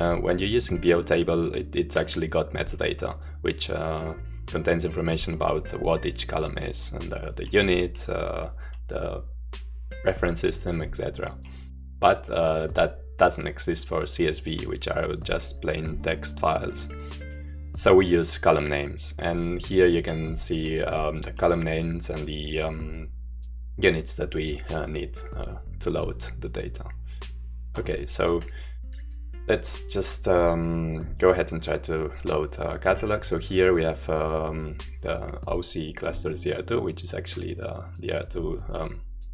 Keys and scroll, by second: 17.5-19.7 j, 20.0-21.8 k, 24.3 j, 25.1 j, 27.1 super+4.